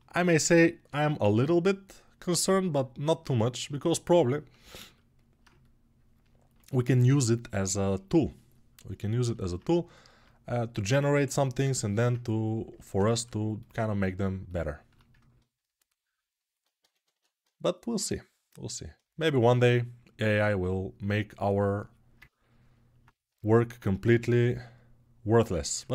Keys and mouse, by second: 3.1-11.5 ctrl+drag, 11.5-18.9 alt+right drag, 18.9 alt+click, 19.0-21.9 alt+right drag, 21.9-25.9 ctrl+alt+drag, 23.8 g.